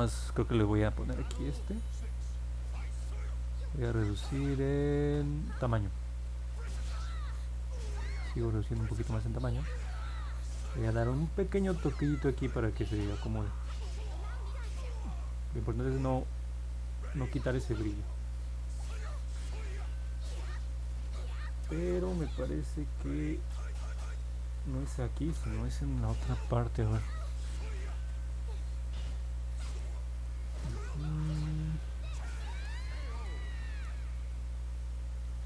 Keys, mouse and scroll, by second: 14.2 click, 17.2 click.